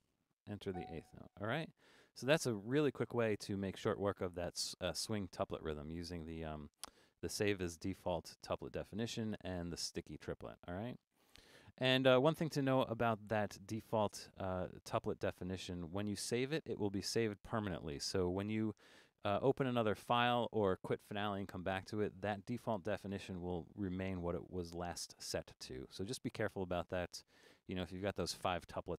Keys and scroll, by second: 0.0-0.3 typing, 12.0 super+9.